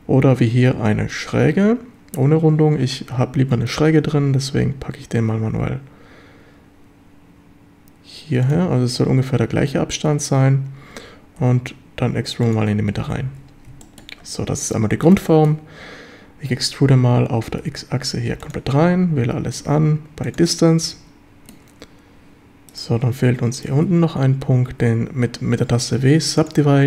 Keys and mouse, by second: 3.9 e, 8.4 click, 10.9 e, 11.4 x, 12.5 click, 13.3 a, 13.8 shift+click, 15.2 shift+click, 17.6 x, 18.4 click, 18.7 a, 19.2 a, 19.6 q, 20.8 a, 21.2 shift+click, 23.5 shift+click, 24.7 w.